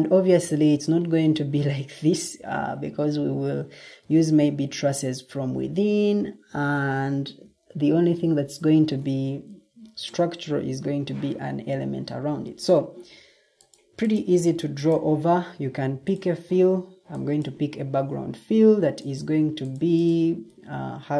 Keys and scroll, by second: 9.9 Escape.